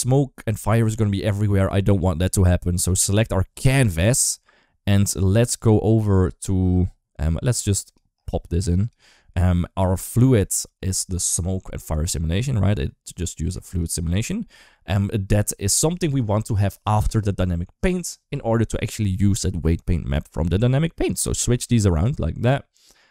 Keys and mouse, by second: 2.7 click, 7.7 click, 8.7 click, 11.8 click, 13.5 click, 21.2-21.9 drag, 23.0 click.